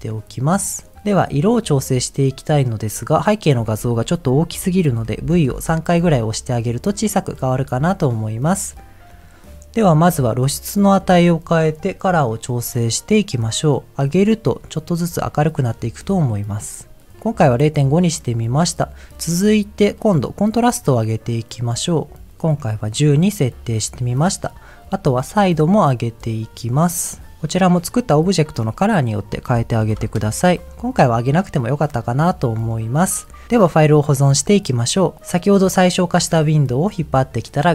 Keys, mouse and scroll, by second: 1.0 middle click, 1.0 scroll down 3, 5.5 v, 7.1-7.5 scroll down 2, 7.5 middle click, 8.4-9.2 scroll up 2, 9.2 middle click, 9.2-9.6 scroll up 1, 9.9-10.2 scroll up 2, 10.7 middle click, 14.1-15.3 shift+drag, 17.4 middle click, 19.1 scroll up 1, 19.2 middle click, 21.1-22.7 drag, 23.4-24.4 scroll up 1, 25.1-30.3 shift+drag, 30.7 middle click, 30.7 scroll down 2, 31.2 middle click, 31.9-32.4 scroll down 2, 32.4 middle click, 32.8-33.1 scroll up 1.